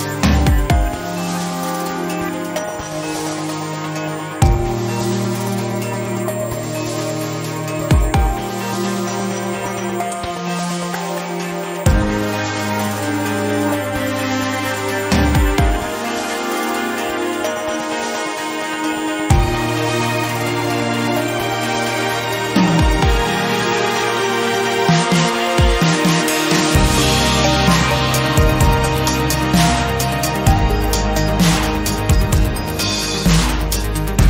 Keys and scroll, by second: 5.5 1, 11.5 e, 20.2 ctrl+r, 29.1 s, 34.0 s.